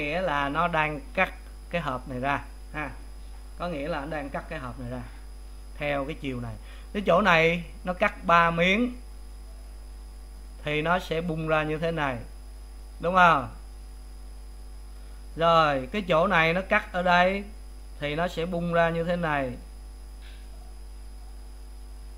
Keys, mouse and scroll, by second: 10.3-22.1 drag.